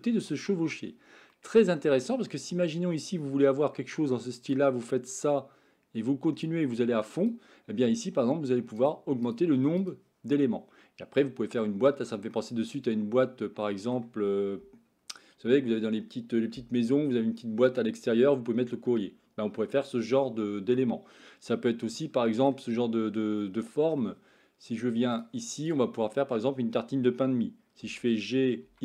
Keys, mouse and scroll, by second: 1.4-2.3 middle drag, 4.5 click, 6.4 click, 8.8 click, 9.3 click, 9.8 click, 10.3-11.6 middle drag, 12.3-14.0 middle drag, 20.8-22.5 middle drag, 23.4 middle click, 25.2 click, 25.9 middle click, 27.8 g.